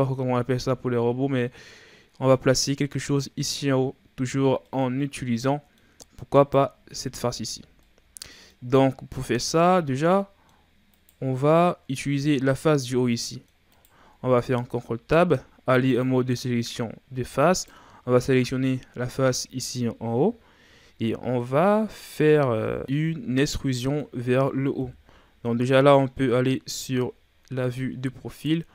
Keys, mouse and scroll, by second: 4.6-6.0 middle drag, 6.0-6.3 scroll up 2, 6.3 right click, 6.9 Tab, 7.7 scroll down 1, 7.8 middle click, 8.8-9.2 scroll up 2, 9.2-10.9 middle drag, 10.9 right click, 13.1 middle click, 13.7 right click, 14.1 ctrl+Tab, 17.4 right click, 21.4-22.4 middle drag, 22.4-22.8 shift+scroll down 3, 22.8-23.9 middle drag, 24.7 KP_3, 26.2-26.9 shift+scroll up 5.